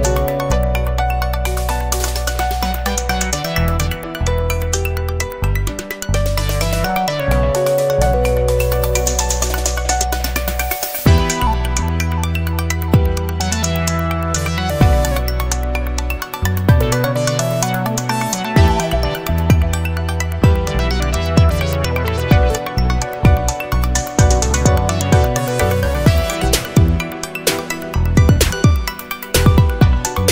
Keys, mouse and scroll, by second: 0.0 scroll up 1, 1.2-4.9 drag, 5.5-7.4 drag, 8.1-11.4 drag, 12.5 click, 13.8 click, 14.7 scroll up 2, 15.6 scroll up 2, 17.2-18.7 drag, 19.0-20.5 scroll down 1, 20.5-21.2 scroll down 1, 22.1 click, 23.4 1, 24.3 click, 25.4 BackSpace, 25.9 0, 27.3 scroll down 2, 27.8-28.5 scroll up 4, 29.1-30.3 drag.